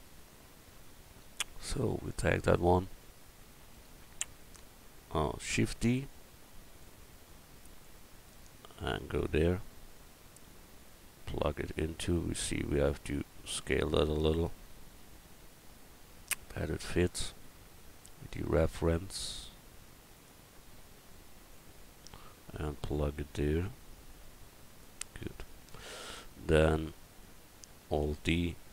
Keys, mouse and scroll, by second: 0.0 middle click, 0.6 right click, 1.6 middle click, 5.6 shift+d, 8.0-9.9 middle drag, 10.0 middle click, 13.6 s, 16.7 s, 19.0 s, 28.0 alt+d.